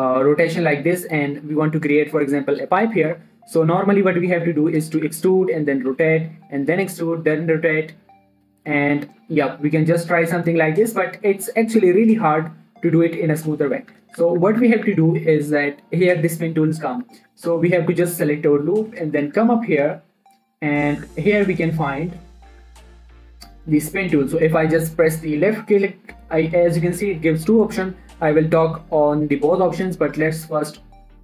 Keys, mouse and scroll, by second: 3.2 shift+Num_Lock, 3.2 scroll down 1, 3.6-4.2 scroll up 1, 4.2-4.6 scroll down 1, 4.6-7.8 typing, 5.2 click, 6.2 click, 6.8 click, 7.7 click, 8.6 click, 9.1 e, 9.3 click, 9.6 r, 10.1 click, 10.7 e, 11.0 click, 11.2-12.1 scroll down 1, 14.1 ctrl+Num_Lock, 14.1 scroll down 1, 14.3 ctrl+z, 17.1 ctrl+z, 18.4-20.1 scroll up 2, 24.0-31.2 drag.